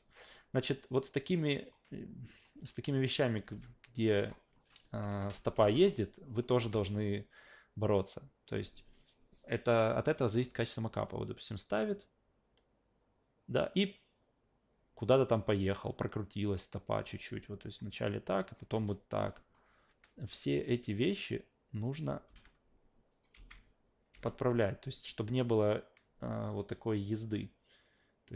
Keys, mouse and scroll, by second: 0.8-1.7 drag, 2.4 click, 3.2 click, 3.5 f, 4.0 click, 4.4 alt+middle click, 5.4 click, 5.6 alt+v, 6.6 alt+v, 6.8-16.9 drag, 17.7 click, 18.7 e, 19.3 alt+middle click, 20.8 click, 22.3 s, 23.1 click, 23.4 alt+v, 24.1 alt+v, 24.3-28.3 drag.